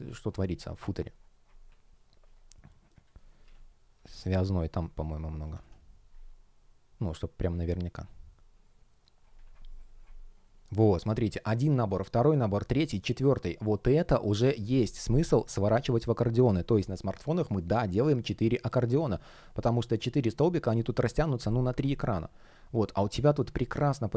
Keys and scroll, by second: 5.3 Down, 5.5 Return.